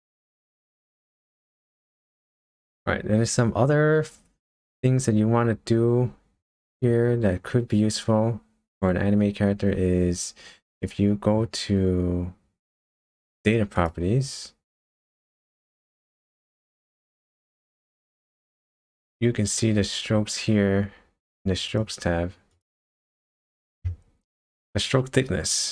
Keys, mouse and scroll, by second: 13.8 click, 17.2-17.8 scroll down 1, 17.8-21.7 scroll down 11, 21.7 click, 22.5 click, 23.1-25.6 scroll down 4.